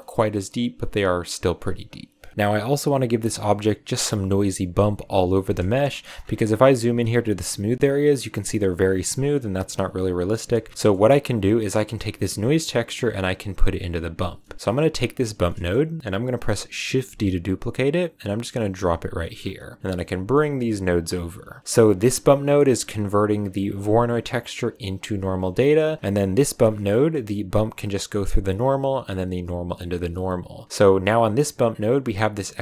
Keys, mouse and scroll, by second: 2.0 click, 5.2 click, 5.8-6.1 shift+middle drag, 6.1-8.3 scroll up 8, 10.7 middle click, 11.7 click, 13.9 click, 14.3 middle click, 14.5 scroll up 3, 14.6 click, 15.4 middle click, 15.7 scroll down 1, 17.1 shift+d, 19.1-19.8 scroll down 3, 19.1 middle click, 19.8 a, 19.8 click, 20.7 click, 21.3 click, 21.6 middle click, 22.0 click, 22.5-23.7 middle drag, 23.7 click, 24.9 click, 25.5-25.8 middle drag, 25.8-26.2 scroll up 2, 26.2 click, 26.7 middle click, 26.9-29.0 scroll up 1, 29.0 click, 30.9 click, 32.1 click.